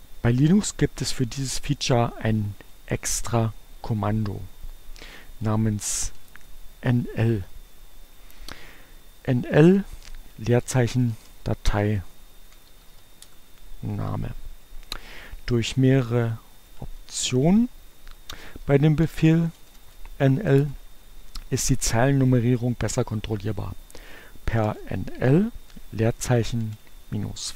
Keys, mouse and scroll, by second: 5.5-6.4 typing, 10.4-13.6 typing, 16.6 n, 17.1 l, 18.6-20.4 typing, 20.7 Return, 24.3-27.5 typing.